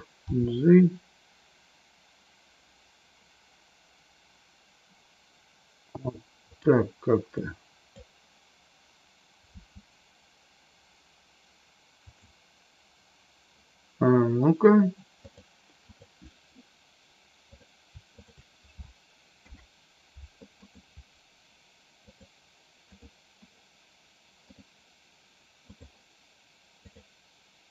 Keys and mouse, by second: 0.2 g, 7.4 click, 9.5 g, 12.0 click, 15.2 click, 17.5 click, 19.4 ctrl+p, 22.0 click, 22.9 click, 24.5-25.7 drag, 26.7 click.